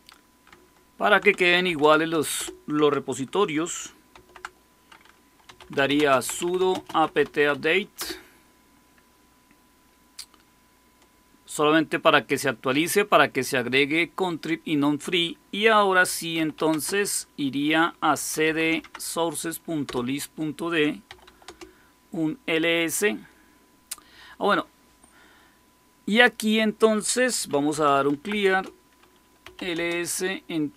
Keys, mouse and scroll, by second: 1.4-2.1 typing, 2.3 Return, 3.3-7.9 typing, 16.0-19.0 typing, 19.8 Return, 20.8-21.5 typing, 27.2-30.7 typing.